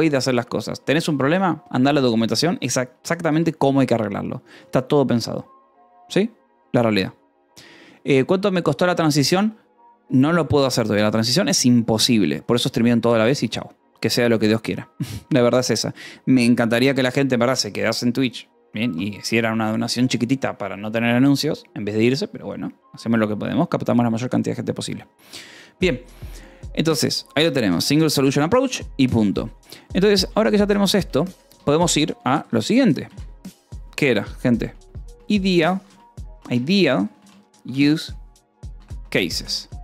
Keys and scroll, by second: 2.0 o, 3.0 :, 3.2 space, 30.6 BackSpace, 30.9 Escape, 31.2 o, 31.5 Return, 32.7 shift+3, 33.0 space, 35.4-39.6 typing, 39.1 Escape.